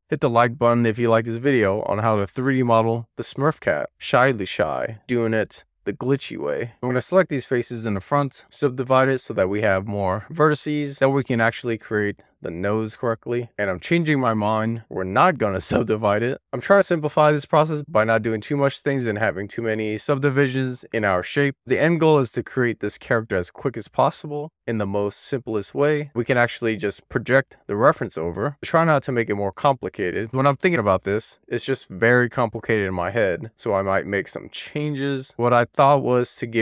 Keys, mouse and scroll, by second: 0.3 alt+z, 0.9-1.4 scroll up 2, 1.4 click, 3.4 alt+z, 4.2 scroll down 1, 4.3-5.4 middle drag, 5.3 scroll up 1, 5.5-6.3 scroll down 2, 6.6 scroll down 2, 6.7 ctrl+super+z, 6.8 ctrl+click, 7.6 ctrl+click, 8.3 ctrl+click, 8.9-10.1 right drag, 13.2 middle click, 14.5 alt+middle click, 15.2 alt+middle click, 16.4 alt+z, 17.3-18.5 scroll up 3, 20.7 1, 22.1-22.9 scroll up 1, 22.9-24.2 scroll up 1, 26.0 click, 28.6 click.